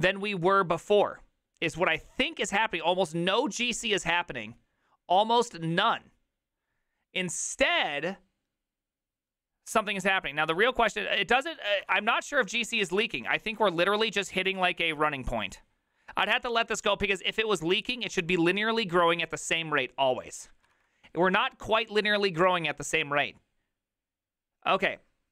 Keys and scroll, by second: 11.5 alt+{, 11.5 ctrl+a, 11.7 [, 11.9 ctrl+u, 12.2 ctrl+u, 12.6 ctrl+u, 13.5 ctrl+u, 13.5 ctrl+d, 13.7 ctrl+d, 13.9 ctrl+d, 14.0 ctrl+d.